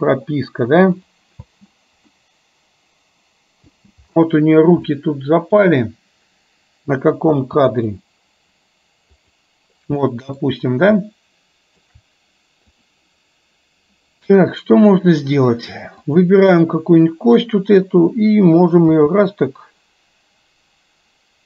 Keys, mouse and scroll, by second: 1.1 click, 1.5 space, 2.2-3.8 middle drag, 5.1-5.8 middle drag, 7.3 space, 8.0 click, 9.3 click, 10.1 middle click, 11.1-12.0 shift+middle drag, 16.1 click, 18.8 g.